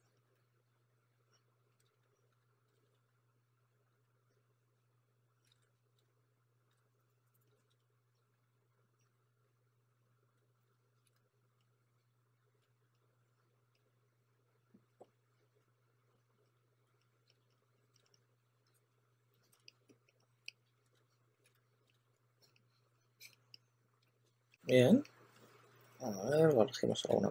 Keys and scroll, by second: 0.0-0.8 typing, 1.8 2, 2.3 s, 3.6 typing, 5.4 super+z, 5.6 2, 5.9 2, 7.7-9.3 typing, 10.6 2, 12.5 s, 15.2-18.6 typing, 19.8-21.9 typing, 24.4 super+a, 25.3 2, 26.8-27.3 typing.